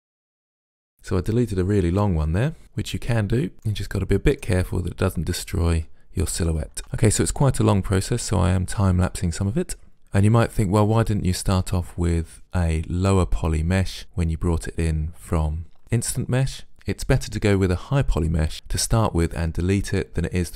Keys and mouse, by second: 0.1 right click, 0.6 middle click, 0.7 middle click, 2.0 Delete, 2.4 middle click, 3.8 middle click, 4.6 right click, 4.9 middle click, 5.5 Delete, 6.3 right click, 6.8 right click, 7.0 ctrl+z, 7.8 right click, 8.2 middle click, 8.8 Delete, 9.2 middle click, 10.1 middle click.